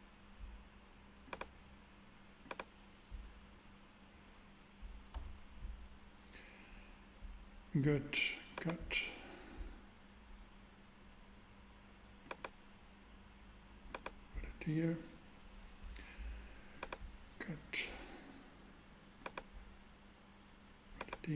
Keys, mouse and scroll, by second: 5.1 Tab, 5.2 Tab, 8.7-10.4 drag, 16.7-18.4 drag.